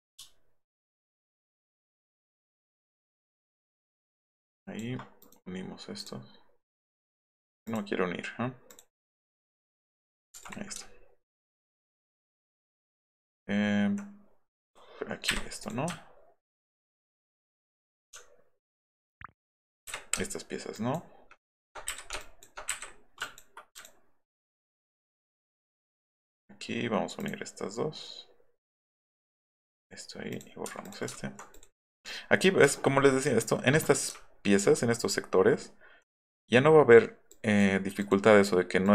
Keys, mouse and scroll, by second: 3.3 ctrl+click, 4.6 ctrl+click, 5.2 click, 6.0 click, 6.7 click, 6.9 click, 7.7 click, 8.7 click, 10.7 alt+middle click, 11.3 alt+middle click, 11.5 alt+middle click, 12.0 alt+middle click, 12.3 alt+middle click, 12.5 alt+middle drag, 13.2 alt+middle click, 14.6 click, 15.6 click, 16.0 alt+middle click, 16.9 alt+middle click, 18.9 ctrl+click, 20.8 ctrl+click, 21.5 ctrl+click, 21.9 Delete, 22.2 ctrl+click, 22.7 ctrl+Delete, 23.2 ctrl+click, 23.7 ctrl+click, 24.3 ctrl+click, 25.3 ctrl+click, 27.2 click, 28.6 click, 29.7 click, 30.3 click, 30.8 click, 31.1 alt+middle click, 31.5 click, 31.8 click, 32.4 middle click, 32.4-33.1 scroll, 32.7 alt+middle click, 33.0 alt+middle click, 34.1 alt+right click, 35.0 alt+middle click, 35.5 alt+middle click, 36.2 drag, 37.3-37.6 drag, 38.0 click, 38.8 drag.